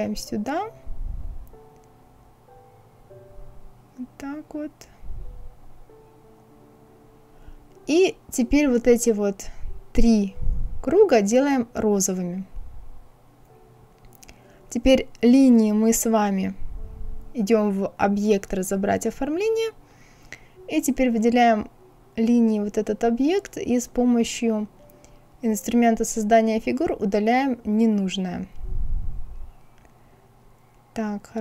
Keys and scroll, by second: 1.3 Right, 2.6 Right, 3.7 Right, 4.6 Right.